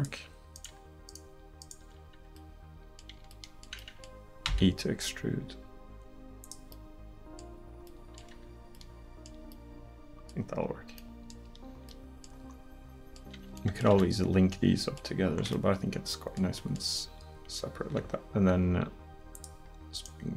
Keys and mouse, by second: 0.0 click, 0.6-1.7 right drag, 4.5 e, 8.3 Tab, 14.8 middle click, 15.7-16.7 middle drag, 18.0 Tab.